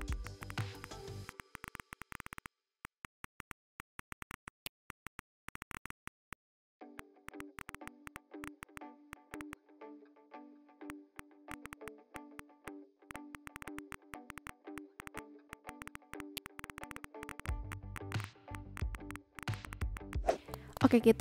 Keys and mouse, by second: 0.0 click, 0.4 click, 0.6 click, 0.8 click, 1.2 click, 1.9 click, 2.6 click, 2.8 click, 3.0 click, 3.2 click, 3.4 click, 3.7 ctrl+z, 3.9 click, 4.0 ctrl+z, 4.1 click, 4.3 click, 4.4 ctrl+z, 4.4 click, 4.9 click, 5.0 click, 5.2 v, 5.3 click, 5.9 b, 6.0 click, 6.3 click, 7.0 click, 7.2 click, 7.4 click, 7.5 click, 7.8 click, 8.0 click, 8.4 click, 8.6 click, 8.7 click, 9.1 click, 9.3 v, 9.4 click, 9.5 Delete, 10.8 b, 10.9 click, 11.0 ctrl+z, 11.2 click, 11.3 click, 11.4 a, 11.5 click, 11.8 click, 12.1 click, 12.3 z, 12.4 click, 12.6 click, 13.0 a, 13.1 click, 13.3 click, 14.2 Delete, 14.4 click, 14.7 click, 15.0 click, 15.3 click, 15.5 click, 15.6 click, 16.1 click, 16.3 click, 16.6 click, 17.2 click, 17.7 click, 17.9 click, 18.2 click, 18.5 click, 18.7 v, 18.7 click, 18.9 click, 19.1 click, 19.2 ,, 19.3 click, 19.6 click, 20.7 click.